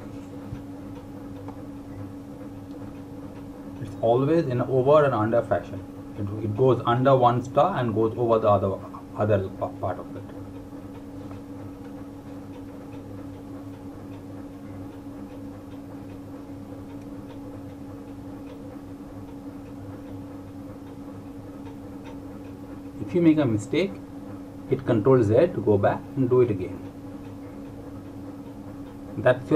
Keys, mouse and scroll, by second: 0.0 click, 7.7 click.